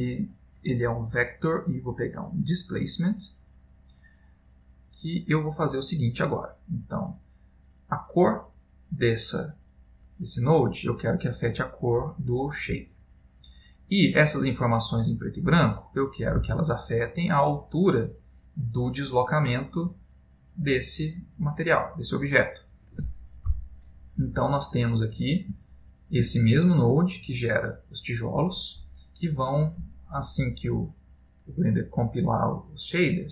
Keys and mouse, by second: 4.8 middle click, 6.8 click, 7.6 middle click, 9.2 click, 9.2 middle click, 10.4 click, 13.3 click, 13.5 middle click, 14.8 click, 16.5 click, 18.6 click, 20.1 click, 21.5 click, 24.9 middle click, 25.7 ctrl+middle click, 27.1 click.